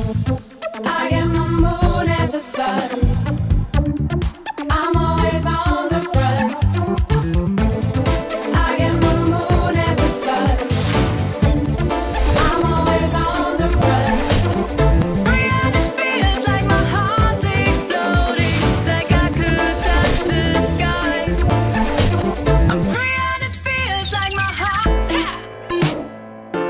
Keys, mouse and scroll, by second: 0.8 alt+drag, 7.7 click, 13.4 click.